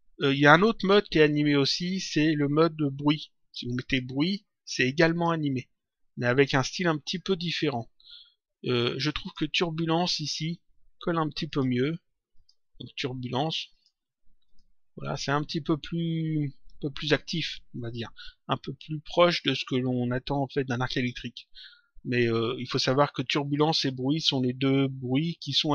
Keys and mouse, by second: 1.8 click, 3.7 click, 5.0 click, 9.2 click, 11.4 click, 13.6 click, 22.0 click, 23.3 click.